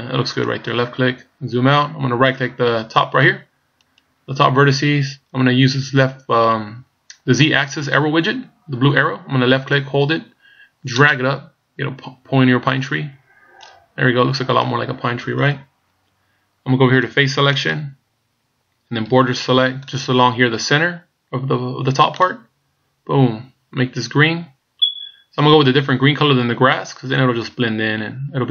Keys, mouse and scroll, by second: 1.3-2.9 scroll down 1, 3.9 right click, 4.7 scroll down 1, 9.7 click, 14.0-17.2 scroll down 1, 17.6 click, 19.1 b.